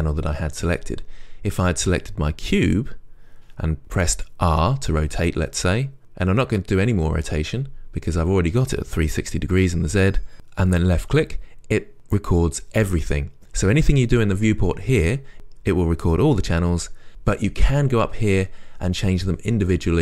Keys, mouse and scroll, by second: 4.8 r, 13.2 click.